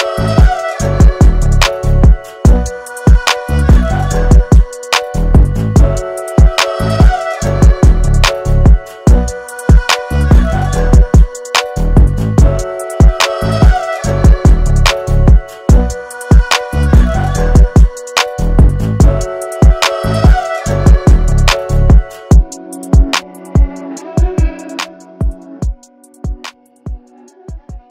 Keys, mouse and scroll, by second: 4.7 click, 11.5 click, 13.2 alt+scroll down 1, 13.7 space, 13.8 click, 14.6 alt+scroll up 1, 15.0 space, 15.0 click, 19.4 ctrl+j, 20.5 alt+scroll down 1, 20.9 space, 21.0-27.9 drag.